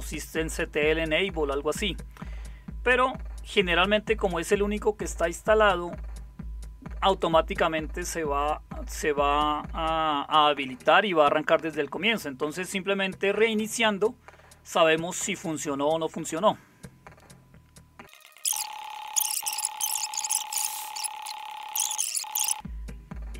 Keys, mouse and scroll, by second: 19.8 alt+super+KP_9, 20.5 alt+super+KP_9.